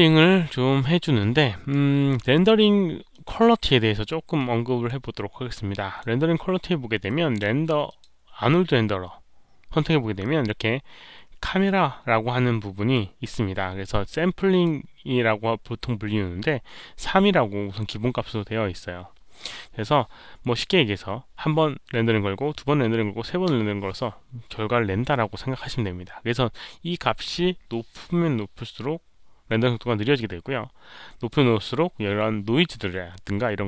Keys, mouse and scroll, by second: 1.1-1.6 drag, 3.0 click, 4.3 click, 5.4 click, 7.8 click, 10.8 click, 14.3 click, 16.6 click, 18.6 click, 25.1 click.